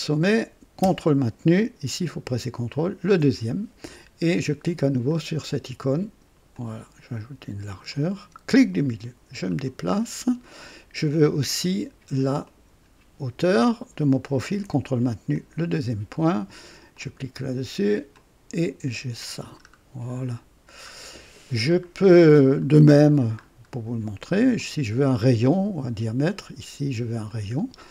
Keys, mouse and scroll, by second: 2.7 ctrl+click, 5.0 click, 6.5-8.0 drag, 8.6-9.6 middle drag, 9.7 scroll down 1, 12.4 click, 15.3 ctrl+click, 16.9 click, 18.1-19.4 drag, 19.5-19.8 scroll down 1, 20.1-21.0 middle drag, 21.3 scroll down 1, 21.8-22.1 scroll up 1, 22.6 middle click, 23.4 scroll up 1, 24.5 click, 27.2 click.